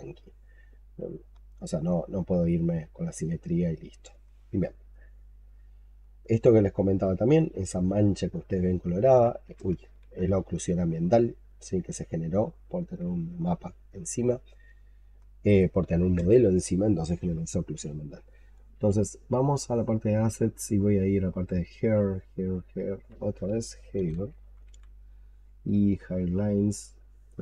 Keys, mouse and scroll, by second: 0.1 alt+click, 1.1 alt+click, 1.4 alt+middle click, 1.5 alt+click, 2.0 alt+click, 2.7 alt+click, 3.6 alt+click, 4.8 alt+click, 5.6 alt+click, 6.1 alt+right click, 6.7 alt+click, 8.0 alt+middle click, 8.3 alt+click, 9.9 ctrl+z, 10.5 alt+middle click, 10.6 alt+click, 11.4 alt+click, 12.3 alt+click, 14.1 alt+click, 15.1 alt+click, 23.6-25.0 typing.